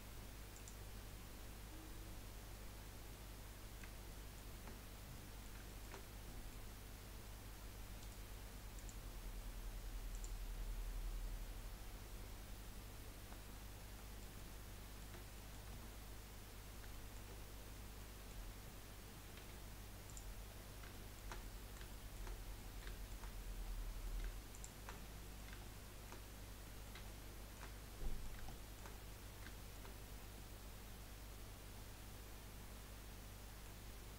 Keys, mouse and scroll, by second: 2.5 scroll down 1, 2.8-4.5 middle drag, 4.5 Tab, 4.9-5.2 scroll down 2, 5.2-7.2 middle drag, 7.2-8.0 scroll up 1, 8.0-10.1 right drag, 10.1 click, 13.5-13.9 scroll up 2, 13.9-15.7 middle drag, 15.7 Tab, 16.5-16.9 scroll up 1, 16.9 shift+scroll down 1, 17.1 shift+middle click, 17.3-18.0 scroll up 1, 18.0-19.4 middle drag, 19.4 2, 20.1 click, 20.5-20.9 scroll down 4, 20.9-22.3 shift+middle drag, 22.3 scroll up 3, 22.6 middle click, 23.3-23.6 scroll up 1, 23.6 middle click, 24.5 shift+click, 25.1-28.0 middle drag, 28.0 scroll down 1, 28.2 shift+middle click, 28.9-29.5 scroll up 2, 29.5 shift+middle click, 29.9-30.3 scroll up 2, 30.3 scroll down 1, 30.5-33.5 middle drag.